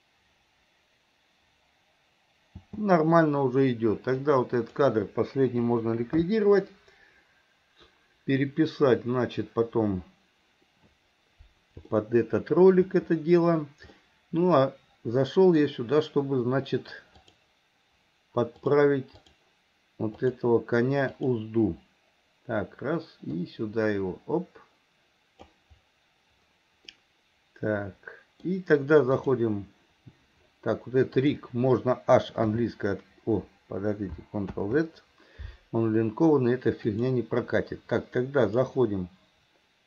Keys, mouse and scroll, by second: 2.7 space, 4.2-4.9 drag, 12.0-12.9 shift+middle drag, 14.1-17.2 middle drag, 17.2 click, 18.6 click, 20.2 click, 21.1 click, 23.5-25.5 drag, 27.0-29.2 middle drag, 29.2 click, 31.2 click, 32.6 h, 34.7 ctrl+z, 36.9 click, 38.5-39.8 drag.